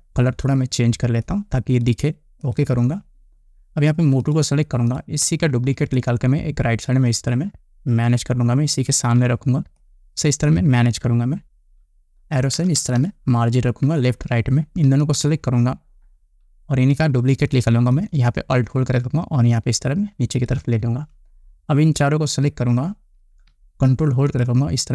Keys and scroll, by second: 13.3 Left.